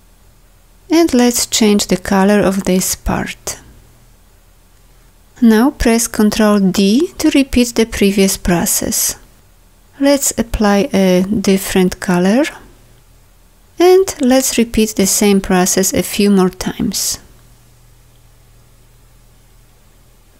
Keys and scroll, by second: 6.9 ctrl+d, 18.0 ctrl+d.